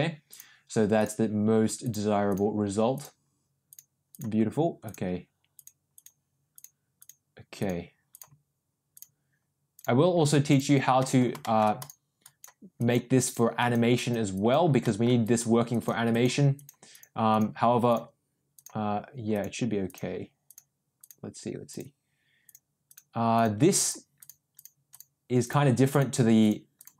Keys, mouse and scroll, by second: 0.2 click, 0.9 click, 1.8 click, 2.2 click, 2.9 click, 3.6 click, 4.0 click, 4.8 click, 5.5 click, 5.9 click, 6.5 click, 6.9 click, 7.5 click, 8.1 click, 8.9 click, 9.7 click, 10.4 click, 11.0 middle click, 11.4 shift+middle click, 11.7 click, 12.2 click, 12.7 click, 13.1 click, 13.5 click, 13.9 click, 14.3 click, 14.8 middle click, 15.2 click, 15.6 click, 16.0 click, 16.5 click, 16.9 click, 17.2 click, 17.8 click, 18.5 click, 19.3 click, 19.8 click, 20.4 click, 20.9 click, 21.6 click, 22.4 click, 22.8 click, 23.3 click, 23.8 click, 24.1 click, 24.5 click, 24.9 click, 25.4 click, 25.9 click, 26.4 click, 26.7 click.